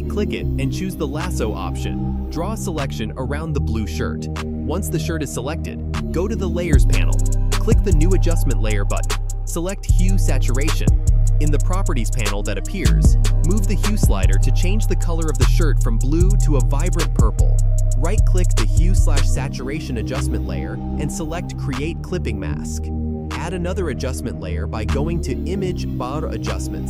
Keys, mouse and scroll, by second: 5.3 click, 8.7 click, 10.2 click, 12.6-17.1 drag, 18.1 right click, 19.7-26.8 drag.